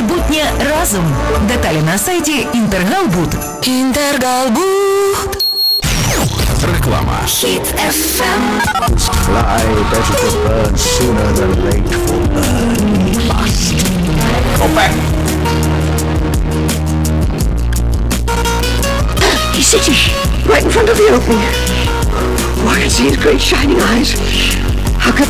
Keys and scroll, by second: 1.0 Down, 1.6 Return, 1.6 typing, 15.1 Page_Down.